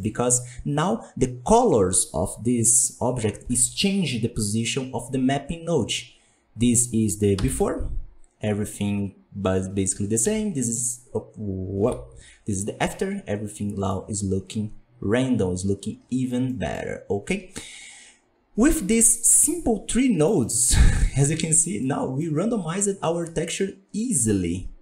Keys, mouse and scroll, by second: 6.6 right click, 7.3 m, 7.9-9.9 scroll up 11, 9.9 scroll down 1, 10.1 m, 11.7 m, 12.3 scroll down 5, 12.7-13.8 middle drag, 13.8-15.4 scroll up 14, 15.4-16.8 scroll down 16, 16.4 middle drag, 21.2-21.7 scroll up 6, 21.7-24.8 middle drag.